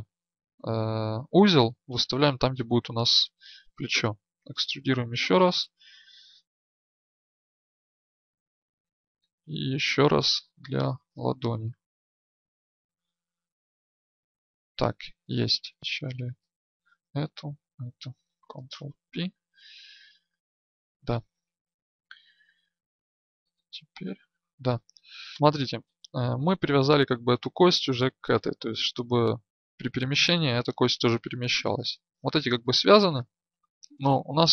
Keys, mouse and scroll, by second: 4.0 e, 5.4-10.3 drag, 10.3 e, 12.9-15.8 drag, 15.8-19.1 right drag, 18.6 ctrl+p, 21.6-25.3 drag.